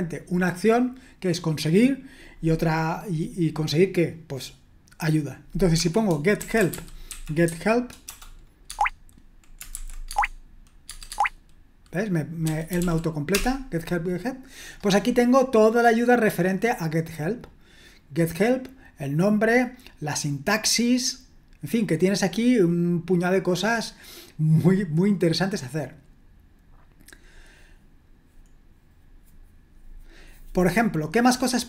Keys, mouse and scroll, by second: 6.4-8.1 typing, 8.7 Tab, 9.7 typing, 12.4-13.3 typing, 16.9-17.9 scroll up 1, 17.9-19.0 scroll up 2, 19.0 scroll up 1, 19.4-20.5 scroll down 1, 20.9-22.1 scroll down 2, 22.1-22.9 scroll down 1, 22.9-24.5 scroll down 1, 24.6-26.0 scroll down 2, 26.0-27.1 scroll down 1, 27.1-28.0 scroll down 1, 28.0-28.5 scroll down 2, 28.5-29.5 scroll down 1, 29.5-30.8 scroll down 1, 30.8-31.6 scroll down 1.